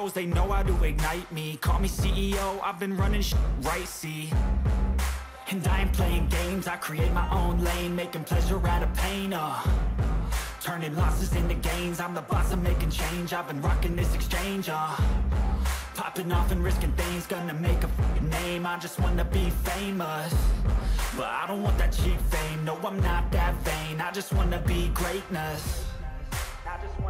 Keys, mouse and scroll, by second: 2.2 click, 5.3 click, 9.3 ctrl+z, 10.2-11.9 ], 14.2 ctrl+z, 16.3 ctrl+z, 21.4 ctrl+z, 23.1 ctrl+z, 25.9 ctrl+z.